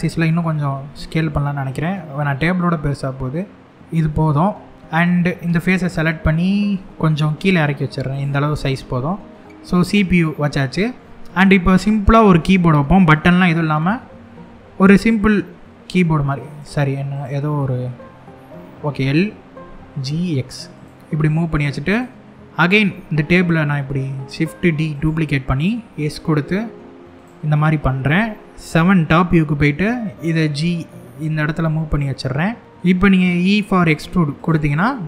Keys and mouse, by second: 0.1 s, 0.5 x, 3.7 click, 5.0 3, 5.3 click, 6.3 g, 6.8 z, 7.8 click, 8.1-10.6 middle drag, 11.9 l, 12.9 middle click, 13.4 g, 14.3 x, 16.1 right click, 16.9 click, 18.0 l, 19.0 g, 19.5 x, 20.4 click, 20.9 middle click, 21.5 click, 22.6 shift+d, 24.6 right click, 25.5 s, 26.8 click, 28.3 KP_7, 29.5 g, 33.4 e, 34.1 click, 34.4 click, 34.7-35.0 middle drag.